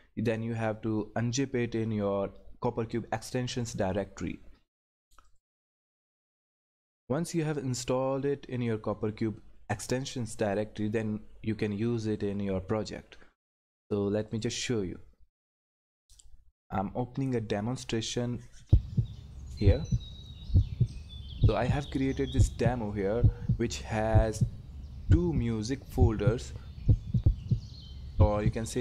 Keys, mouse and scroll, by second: 5.3 click, 14.3 click, 21.3 click, 21.4 click, 26.3 click.